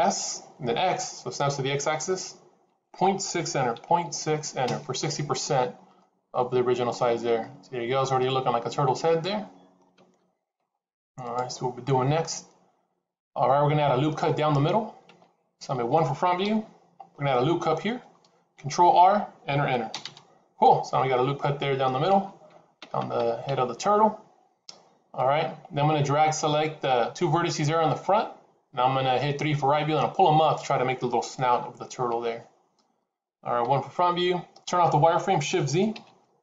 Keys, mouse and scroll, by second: 0.0 s, 5.9 middle click, 16.3 KP_1, 18.4 ctrl+r, 20.5 middle click, 33.5 KP_1.